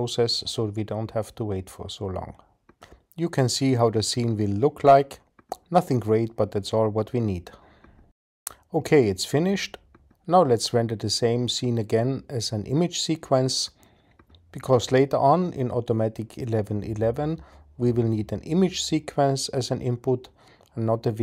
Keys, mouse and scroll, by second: 13.3-17.8 drag.